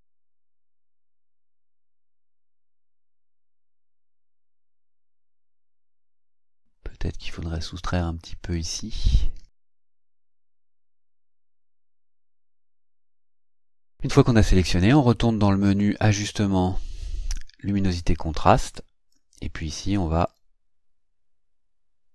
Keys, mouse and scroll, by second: 0.3-1.7 drag, 2.1-3.8 drag, 7.7 click, 8.5 click, 9.0-9.9 ctrl+scroll up 4, 10.2-12.1 ctrl+drag, 12.8 ctrl+scroll down 2, 15.6 click, 17.8 click, 19.1-19.8 drag, 20.3-22.1 drag.